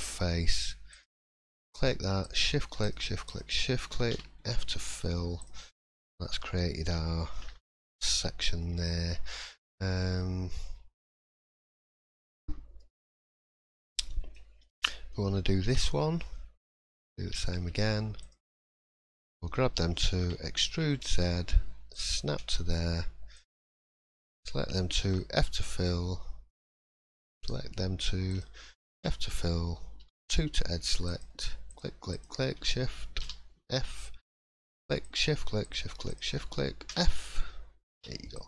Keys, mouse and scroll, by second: 0.9 click, 2.2 shift+click, 3.5 shift+click, 4.1 f, 4.3-4.8 scroll down 3, 4.7 middle click, 5.4 click, 5.8 middle click, 6.1 scroll up 2, 7.2 shift+middle click, 8.6 middle click, 9.6 shift+middle click, 12.8 middle click, 13.3 scroll down 2, 13.6 shift+middle click, 14.6 middle click, 15.0 scroll up 1, 15.6 1, 16.6 click, 17.1 middle click, 18.2 shift+click, 18.5 shift+middle click, 19.1 middle click, 20.2 e, 23.3 click, 24.0 shift+click, 25.0 f, 26.5 click, 27.3 click, 28.3 shift+click, 28.5 shift+click, 28.9 f, 30.0 2, 31.0 shift+click, 32.5 shift+click, 33.2 f, 34.3 click, 35.0 shift+click, 36.9 f, 37.5 scroll down 1, 37.9 3, 38.3 click.